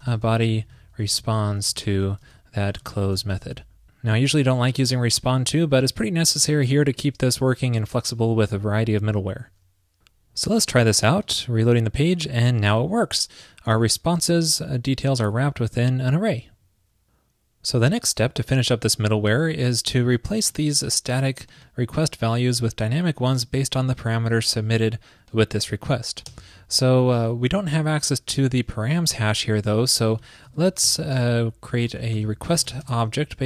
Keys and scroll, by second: 3.6 super+s, 27.8 ctrl+p, 30.3 alt+Left, 30.6 shift+super+Right.